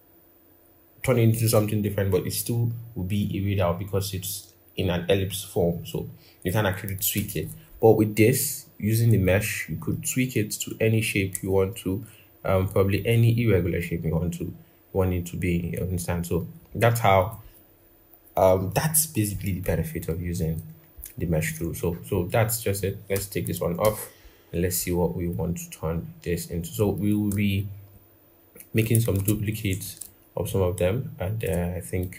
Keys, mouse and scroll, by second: 6.9 ctrl+-, 7.1 ctrl+-, 11.2 a, 22.9 BackSpace, 23.6 ctrl+-, 27.7 alt+click, 29.0 ctrl+z, 29.8 alt+click.